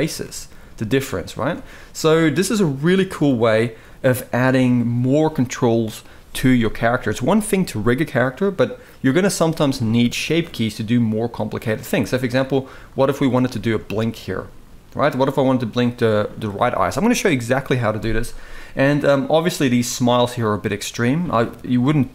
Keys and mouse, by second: 1.1 Tab, 4.8-5.6 drag, 10.4 click, 12.7 click, 13.2 shift+middle drag, 15.7 click, 18.8 click, 19.7-22.1 drag.